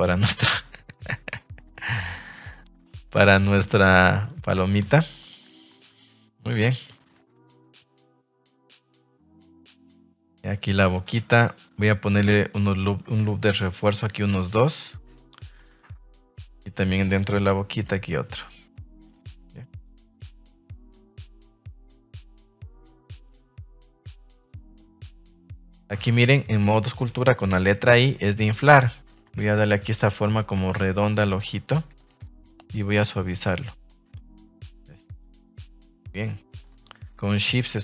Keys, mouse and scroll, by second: 0.0-0.7 middle drag, 1.3 middle click, 1.7 middle drag, 2.3 shift+middle drag, 4.0 middle click, 4.5 right click, 4.8 Tab, 5.1 middle click, 5.7 Tab, 5.9-7.0 middle drag, 7.2 shift+middle click, 8.5-9.6 middle drag, 9.7 shift+middle click, 9.9 middle drag, 10.5 Tab, 10.6-11.0 middle drag, 11.1 Tab, 11.3 right click, 11.6 Tab, 11.8-12.3 middle drag, 12.5 shift+middle click, 13.6 ctrl+r, 15.1 Escape, 15.7 Tab, 16.1 middle click, 16.4 Tab, 17.4 ctrl+r, 19.2 Tab, 19.3 middle click, 19.6 a, 19.7 a, 20.1 middle click, 20.9 middle drag, 21.7-22.6 middle drag, 23.1 right click, 23.3 Tab, 23.6 middle click, 24.8 Tab, 26.1 f.